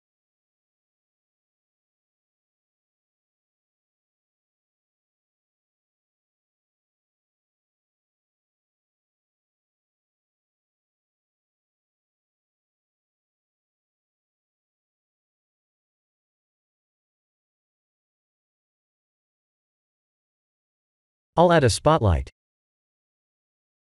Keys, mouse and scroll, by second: 12.8 click, 20.5 click, 21.1 middle click, 22.1 shift+a.